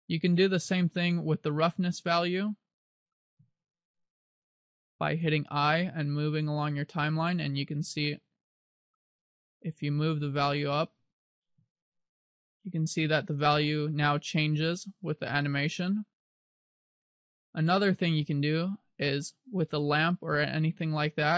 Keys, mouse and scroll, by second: 4.6 click, 8.9 click, 11.0 i, 12.6 click, 19.1 right click.